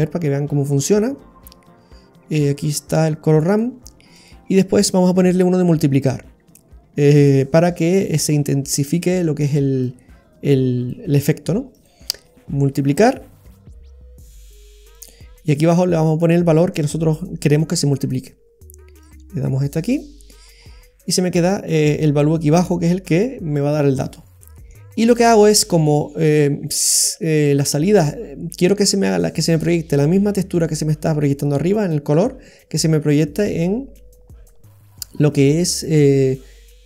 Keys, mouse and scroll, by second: 5.2 shift+a, 8.3-9.0 scroll up 5, 8.9 middle click, 11.9 click, 19.0 click, 20.6-21.0 scroll down 3, 21.0 middle click, 23.6-24.9 scroll down 7, 24.4 middle click, 24.9-26.6 scroll down 5, 25.6 middle click, 26.9 click, 33.4 click, 34.7-35.5 scroll up 10, 35.4 middle click.